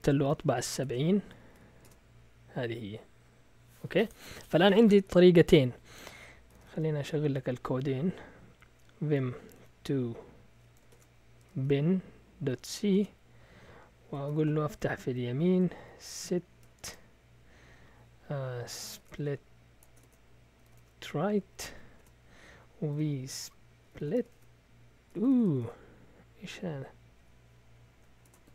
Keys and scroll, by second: 0.8-2.0 typing, 6.3-7.1 typing, 9.5 typing, 10.7-16.8 typing, 18.5-21.1 typing, 21.5 Tab, 21.7 Tab, 22.0 Return, 22.9-26.1 typing, 27.2-28.5 typing.